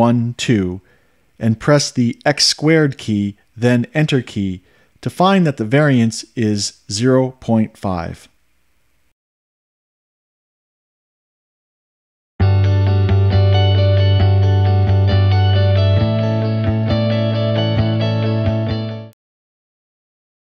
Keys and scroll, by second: 0.0-3.8 typing, 7.3 Return.